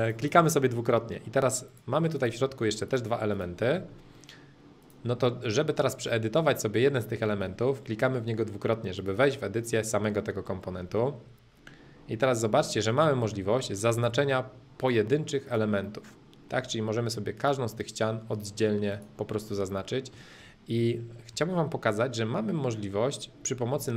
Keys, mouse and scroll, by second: 2.1-4.1 drag, 4.7 click, 5.3-7.3 middle drag, 8.9-11.0 drag, 11.5 middle click, 12.3 click, 13.2 middle click, 13.9-15.7 drag, 15.7 middle click, 17.3-19.3 drag, 19.3 middle click, 20.3 middle click, 22.0 middle click.